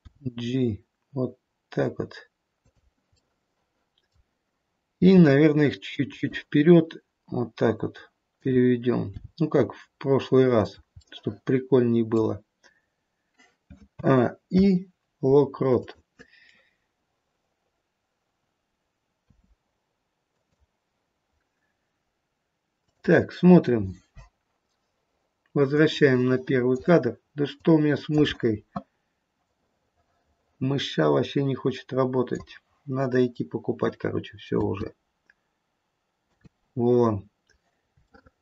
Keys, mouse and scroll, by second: 0.1 g, 5.0 middle click, 5.0 g, 8.3 click, 9.2 g, 10.9 middle click, 11.3 middle click, 13.9 a, 14.4 i, 22.8 click, 23.7-24.7 scroll down 4, 24.1 click, 27.5 click, 29.4 click, 34.4 space, 36.3 space, 37.2-37.9 scroll down 2, 38.0-38.4 shift+scroll down 1.